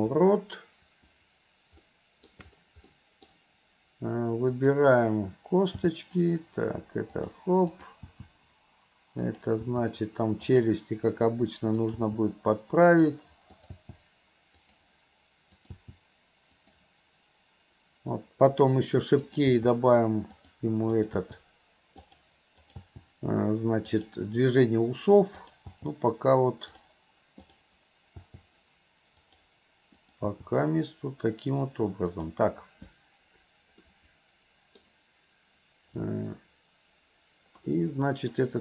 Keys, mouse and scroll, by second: 1.9 middle click, 2.9 middle click, 4.6 click, 5.9 g, 7.7 click, 8.2 g, 9.7 g, 11.9 click, 12.2 g, 13.6 click, 14.0 g, 15.6 click, 16.0 g, 19.2 click, 19.6 g, 21.0 click, 21.4 g, 22.6 click, 23.0 g, 25.4 click, 25.8 g, 28.2 g, 30.0 click, 30.4 g, 33.9 scroll up 1, 34.0-34.9 middle drag, 37.7-38.4 middle drag.